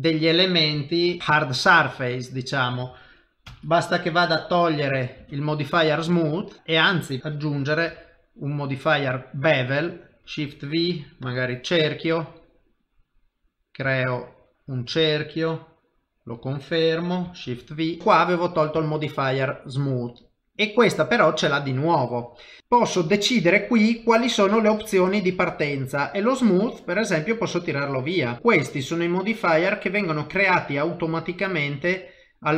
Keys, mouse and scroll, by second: 1.2 middle click, 1.2 shift+v, 1.8 shift+middle click, 2.1 middle click, 3.5 ctrl+shift+v, 6.6 middle click, 7.2 ctrl+shift+v, 10.2 shift+middle click, 10.2 shift+v, 11.3 click, 17.6 shift+v, 18.0 click, 18.0 ctrl+middle click, 18.8 shift+middle click, 19.8 middle click, 20.6 click.